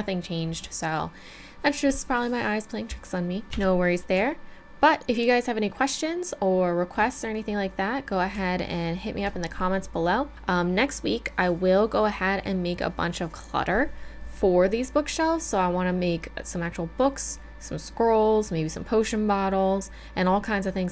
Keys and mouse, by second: 3.6 Tab, 4.3-6.2 middle drag, 9.1 middle click, 14.0-20.9 middle drag.